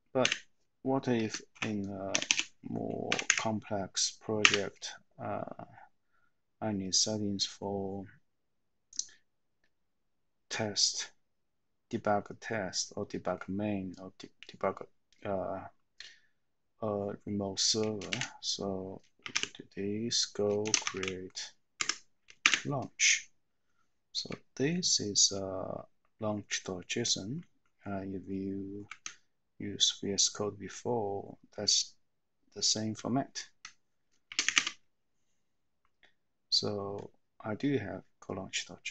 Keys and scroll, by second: 1.1 space, 1.5 =, 1.5 -, 2.8-3.7 typing, 4.4 Return, 18.1-21.7 typing, 21.7 Tab, 22.4 Return, 24.9 Down, 29.0 Up, 29.6 Up, 29.6-34.4 Up.